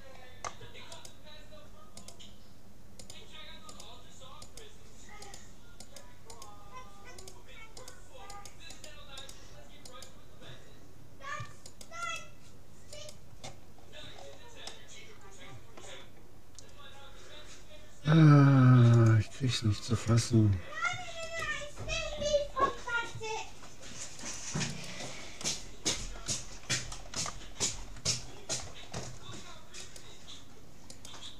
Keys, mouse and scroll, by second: 1.0 click, 1.0-11.5 right drag, 11.7-14.6 right drag, 13.8-16.4 middle drag, 19.0-20.6 drag, 21.4-23.0 right drag, 22.2-24.6 middle drag, 24.2-26.3 right drag, 25.4 click, 26.3 middle click, 27.0-28.4 scroll up 1, 28.4-29.8 middle drag, 29.8-31.3 right drag.